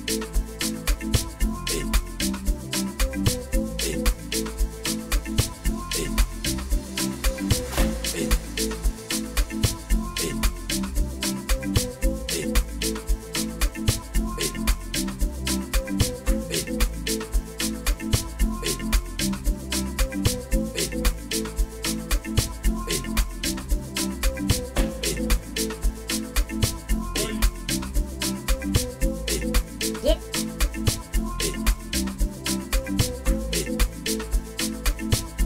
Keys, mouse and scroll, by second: 15.9 click, 30.6 click, 31.3 click, 32.3 drag.